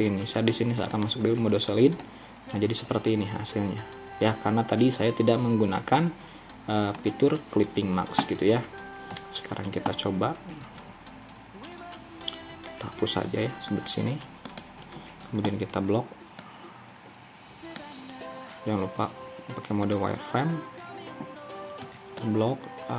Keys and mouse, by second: 2.1-7.1 middle drag, 9.2 KP_1, 10.7 ctrl+r, 15.7 b, 18.9 z, 21.9 b.